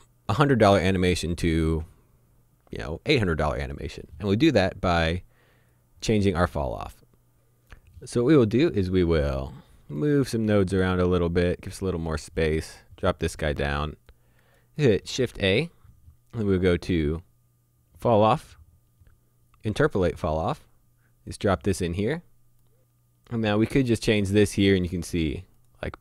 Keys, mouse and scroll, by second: 0.1 click, 5.7 click, 7.7 click, 9.5 middle click, 10.8 click, 15.1 shift+a, 19.0 click, 23.8 click, 25.6 click.